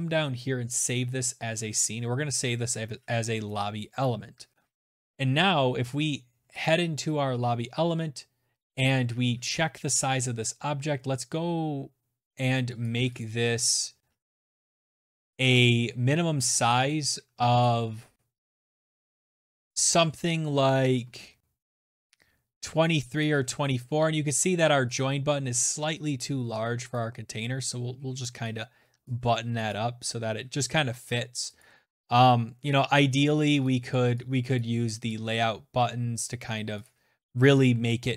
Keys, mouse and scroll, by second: 2.9 click, 5.5 click, 7.8-8.1 scroll, 11.7 click, 12.1 click, 13.2-13.9 scroll, 14.1 click, 22.1 click, 23.8 click, 25.8 click, 27.9 click, 28.6 click, 30.5 click, 32.5 click, 33.4 click, 34.0 click, 35.7 click, 37.4 click.